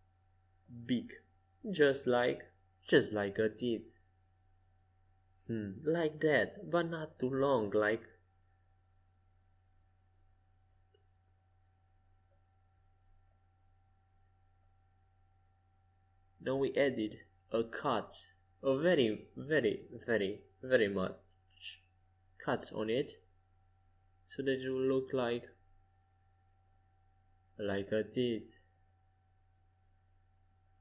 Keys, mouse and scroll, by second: 6.9 ctrl+r, 14.6 a, 19.7 a, 21.6 o, 23.6 g, 26.4 o, 28.0 g.